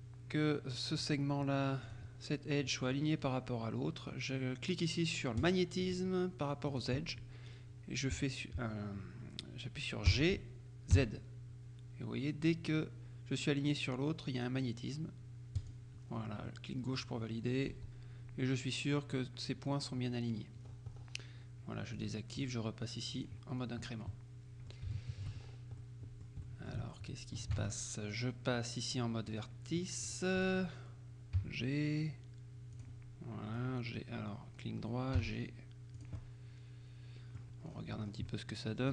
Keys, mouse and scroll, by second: 1.9 click, 5.5-6.5 drag, 6.8 click, 10.2 g, 11.0 z, 15.6 click, 16.1-16.5 scroll down 1, 16.5 click, 17.3-17.9 scroll down 1, 17.8 z, 19.8-20.3 scroll down 1, 20.4-21.4 scroll down 1, 21.4 scroll down 1, 22.0 click, 23.2 click, 23.7-24.2 scroll down 1, 24.2 click, 25.0 shift+click, 25.5-25.9 shift+scroll up 1, 25.9 click, 26.6 shift+click, 27.6 ctrl+Tab, 29.4 click, 29.9 right click, 30.5 right click, 31.5 g, 32.8 click, 33.6 right click, 35.2 g, 36.0 click, 36.2 middle click, 37.8-38.4 scroll down 1, 38.4 middle click.